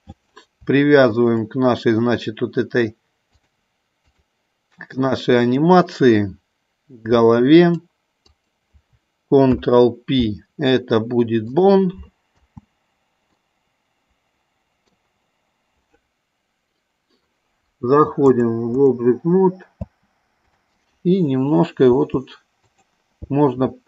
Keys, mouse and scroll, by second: 1.4 shift+click, 3.5 click, 5.3 click, 7.9 click, 8.5 click, 9.8 ctrl+p, 12.8 space, 13.8-15.3 middle drag, 18.6 click, 20.1 space, 20.8 click, 22.2 g.